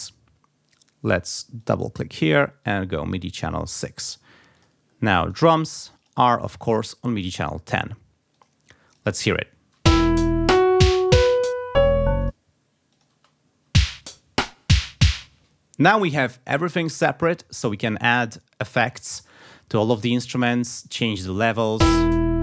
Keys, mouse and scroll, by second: 1.2 click, 2.6 click, 3.6 click, 4.6 click, 5.2 click, 5.9 click, 6.6 click, 7.7 click, 8.3 click, 9.0 click, 9.8 space, 11.4 click, 12.2 click, 12.9 click, 13.1 space, 15.1 space, 20.4 click, 20.9-22.4 drag, 21.7 space.